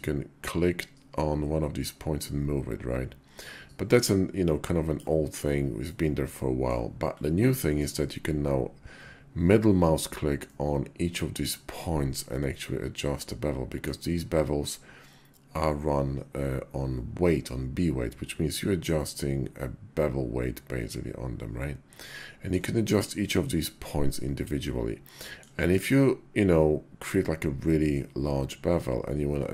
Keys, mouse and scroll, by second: 5.7-6.5 middle drag, 7.3 middle click.